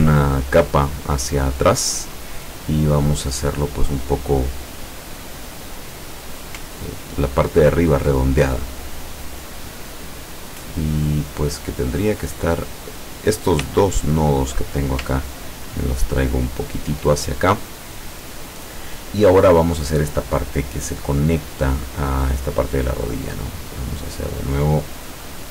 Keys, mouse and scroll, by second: 0.8-4.4 drag, 6.0 click, 6.8-8.2 ctrl+drag, 9.0 click, 13.3 click, 14.3 shift+click, 15.3-17.2 ctrl+drag, 23.2 click, 24.1-24.4 scroll down 2.